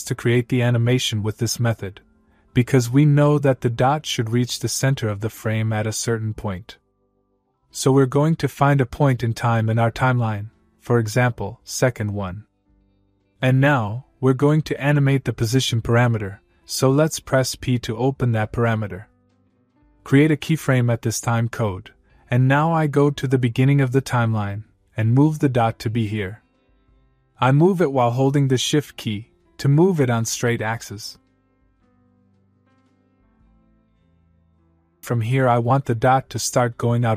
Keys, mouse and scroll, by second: 2.4 scroll up 1, 4.0 scroll down 1, 7.5-10.8 click, 17.1 p, 20.5 click, 22.4-23.9 click, 25.3-31.4 click, 32.6-35.1 click, 36.0-37.1 click.